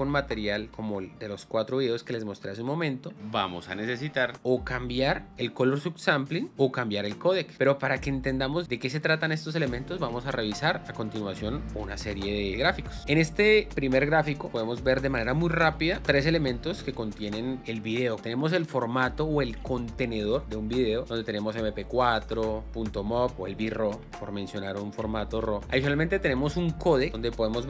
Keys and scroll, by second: 11.7 space, 13.0 space.